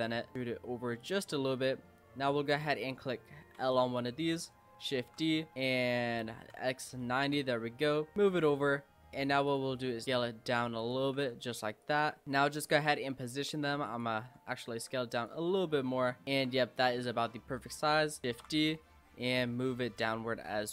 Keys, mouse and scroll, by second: 0.3 e, 1.6-2.6 middle drag, 2.6 click, 3.6 l, 5.0 shift+d, 5.5 r, 8.1 click, 9.5 click, 9.8 s, 11.2 g, 12.1 s, 12.2 g, 13.0 s, 14.2 s, 16.2 click, 16.5 s, 18.3 shift+d, 19.4 click.